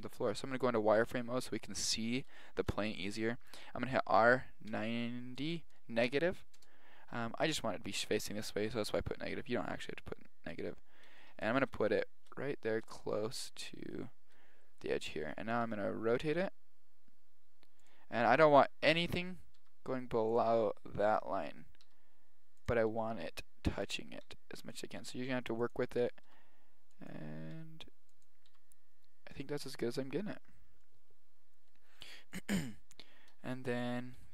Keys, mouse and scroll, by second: 0.2 z, 4.3 r, 8.2 g, 11.2-12.7 drag, 14.7 middle click, 15.7 r, 19.6 g, 21.9 r, 22.9 g, 24.4 r, 25.1 g, 26.3 g, 27.6 r, 28.6 g, 29.8 middle drag, 32.1 KP_7, 34.2 r.